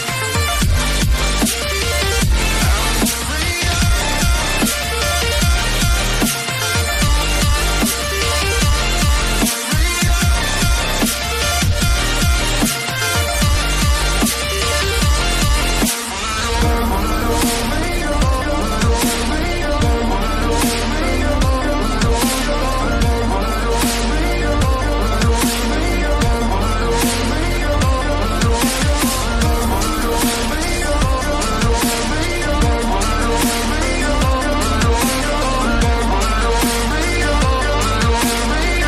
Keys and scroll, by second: 0.0-7.6 typing, 12.4 r, 12.5 Return, 22.5 ctrl+a, 27.6 ctrl+a, 30.7 ctrl+d, 30.9 ctrl+j.